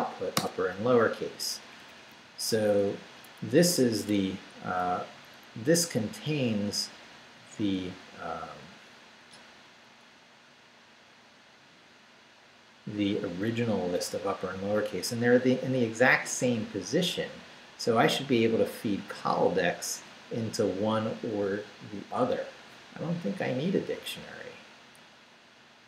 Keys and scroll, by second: 0.4 Return, 1.3 Down, 1.5 Up, 2.6 Right, 7.2 Right, 9.6 Right, 11.0 Left.